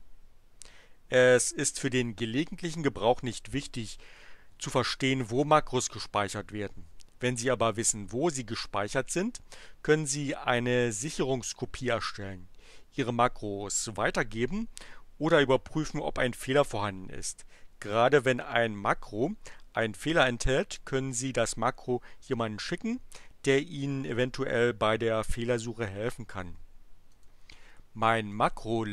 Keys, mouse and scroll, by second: 27.1 click, 28.4 click.